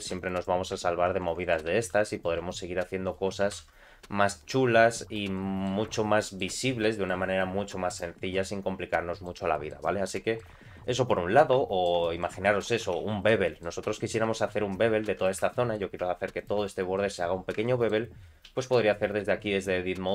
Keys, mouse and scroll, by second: 1.0 ctrl+r, 1.7 2, 2.1 click, 3.0 shift+click, 3.4 g, 5.3 middle click, 5.9 Tab, 6.2 middle click, 6.6 scroll down 2, 6.9 shift+middle click, 7.9 click, 8.3 middle click, 9.5 shift+middle click, 10.1 middle click, 11.5 shift+middle click, 12.0 middle click, 12.4 shift+middle click, 12.9 Tab, 13.4 shift+middle click, 13.8-14.2 scroll up 2, 14.4 shift+middle click, 15.0 2, 15.1 click, 15.5 shift+middle click, 16.4 ctrl+click, 16.7 scroll down 2, 16.9 middle click, 17.6 ctrl+middle click, 18.5 ctrl+b.